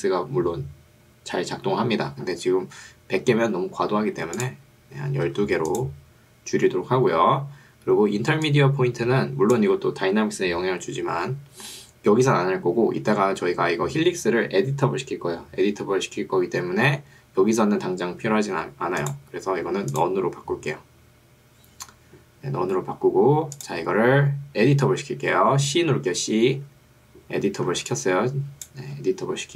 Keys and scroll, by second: 0.3 Escape, 5.3 2, 8.3 ctrl+2, 9.9 Escape, 26.7 c, 27.9 2, 28.9 Escape.